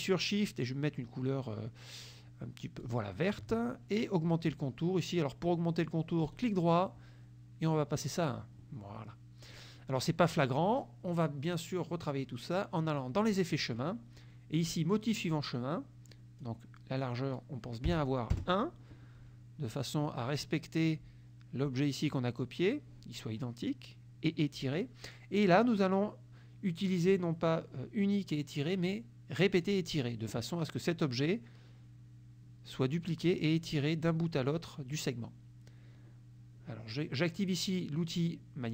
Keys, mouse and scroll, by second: 2.9 shift+click, 6.3 right click, 8.0 click, 9.6 click, 11.5 click, 13.3 click, 16.2 click, 18.0 KP_1, 18.4 KP_Enter, 25.5 click, 29.6 click.